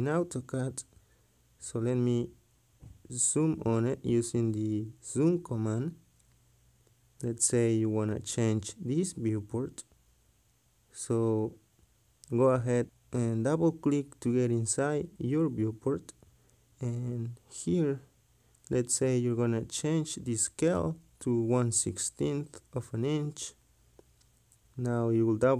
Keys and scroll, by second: 4.8 z, 4.9 space, 12.0 Escape.